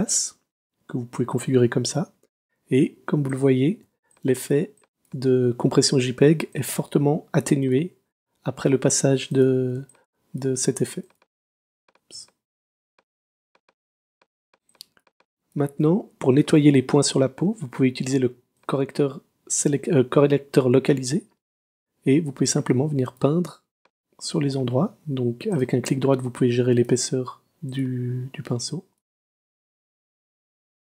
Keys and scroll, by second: 3.8 space, 9.8 space, 12.2 space, 14.1 super+space.